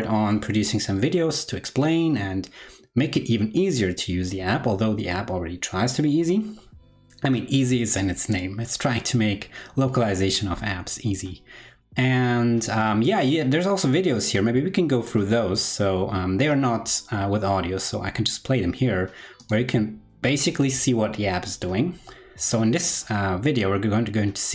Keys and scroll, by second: 16.3 alt+super+l.